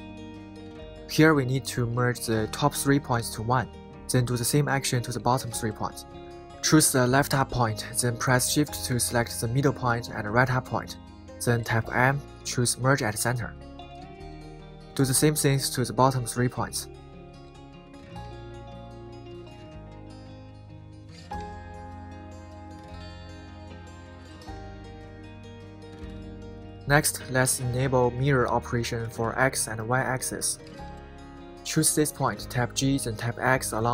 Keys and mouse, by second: 0.3 shift+middle click, 1.8 shift+middle click, 7.9 right click, 9.5 shift+click, 12.6 m, 14.7 click, 16.0 shift+click, 20.6 m, 22.6 shift+middle click, 24.2 shift+middle click, 27.9 middle click, 28.6 middle click, 32.1 click.